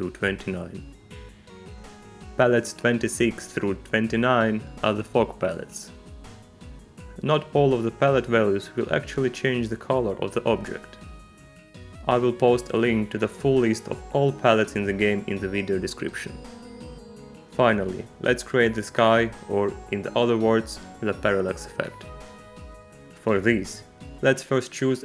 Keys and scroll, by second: 0.1 2, 1.2 Return, 3.7 alt+p, 4.9 6, 5.6 Return, 6.5 -.